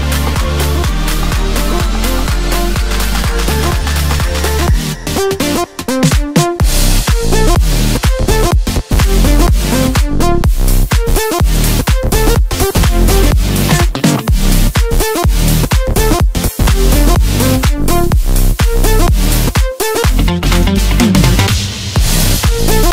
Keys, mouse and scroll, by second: 1.2 shift+click, 2.0-3.9 middle drag, 3.9-5.2 drag, 5.2 middle click, 5.7 scroll up 2, 6.7 e, 8.6 KP_7, 9.8 s, 11.6 scroll down 2, 12.4 middle click, 13.2 scroll up 1, 13.8 e, 15.2 KP_7, 16.2 s, 18.1 middle click, 18.7-19.3 scroll up 1, 19.3 e, 20.6 KP_7, 21.7 s.